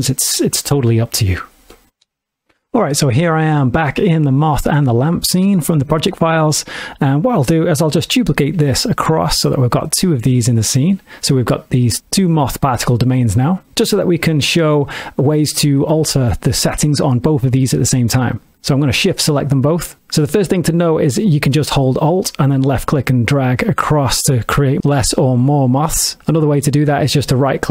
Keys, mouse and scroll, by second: 2.1 space, 8.4 shift+d, 9.8 click, 10.3 shift+middle click, 11.9 click, 18.5 shift+click, 22.6 alt+click.